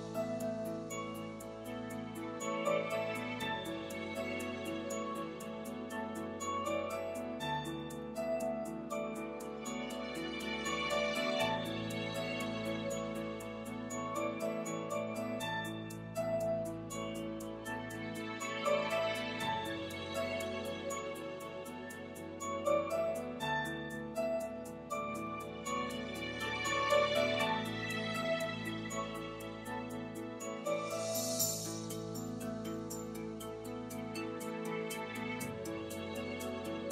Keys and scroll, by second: 10.8 super+s, 36.7 super+s.